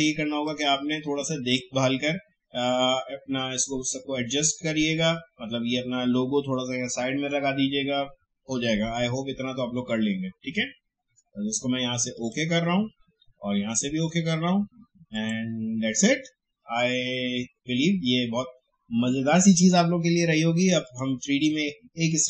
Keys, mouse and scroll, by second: 0.4-4.0 drag, 12.1 click, 20.8 click.